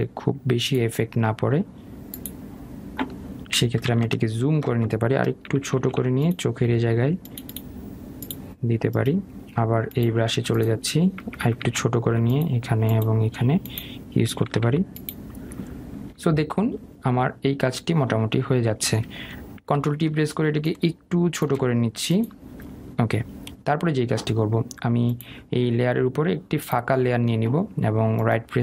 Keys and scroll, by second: 20.1 ctrl+t.